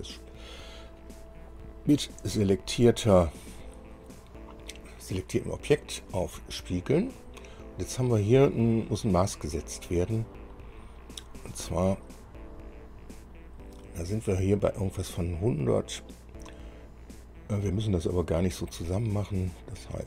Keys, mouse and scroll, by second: 2.3 click, 6.2 click.